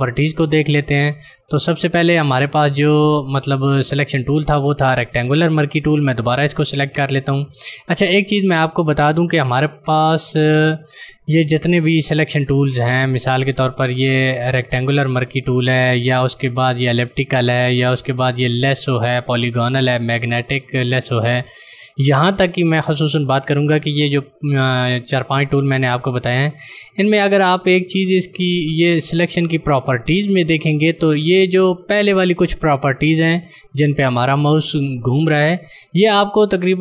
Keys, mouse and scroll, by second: 7.1 ctrl+click, 14.7 click, 17.7 click, 18.6 click.